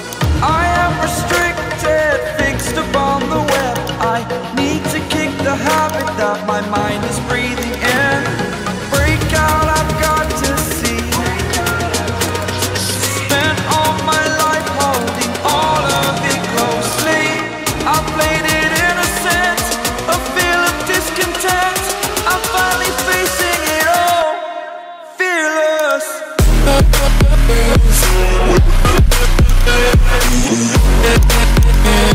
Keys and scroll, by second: 8.9 ctrl+z, 11.6 ctrl+alt+i, 18.9 ctrl+d.